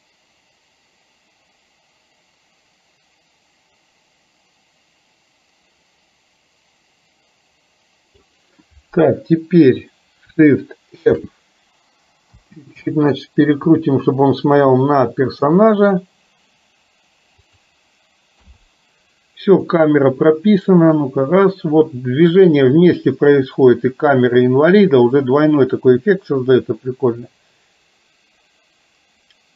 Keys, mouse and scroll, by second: 11.2 shift+f, 18.5 i, 19.9-29.5 drag.